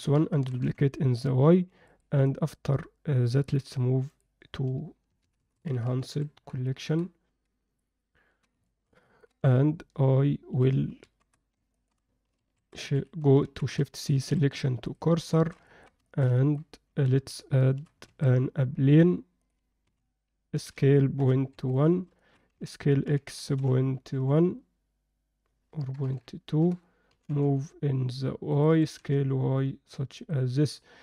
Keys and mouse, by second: 0.4 shift+d, 3.5 m, 7.8-8.4 ctrl+alt+middle drag, 8.6 alt+shift+middle drag, 9.0 ctrl+alt+middle click, 11.1 shift+c, 11.7 ctrl+alt+middle click, 12.4 shift+s, 13.4 shift+c, 14.5 shift+s, 15.3 shift+middle drag, 15.7 ctrl+alt+middle click, 16.1 alt+shift+middle click, 16.3 ctrl+alt+middle click, 18.1 shift+a, 19.9 z, 20.5 s, 22.2 alt+shift+middle click, 22.5 s, 27.1 g, 28.7 s.